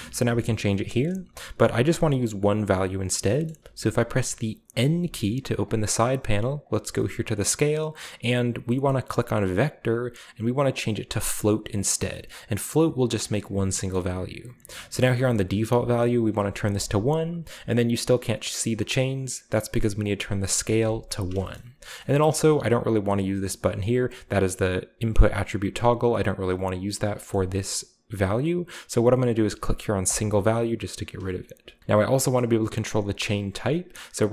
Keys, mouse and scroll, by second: 3.4-4.8 middle drag, 4.8 n, 5.6-6.5 drag, 6.6-7.5 drag, 9.5 click, 11.7-12.6 drag, 13.7-15.7 middle drag, 15.7 click, 16.4 1, 16.7 click, 17.3-18.8 scroll down 1, 20.0 click, 20.5 1, 20.8 click, 21.4 shift+middle click, 21.5-22.8 scroll up 1, 22.2-22.8 middle drag, 27.0-27.9 scroll up 1, 27.1 shift+middle click, 30.0 click, 31.8-32.1 scroll down 1, 32.4-33.1 middle drag, 32.9-34.2 scroll up 1, 34.2 click.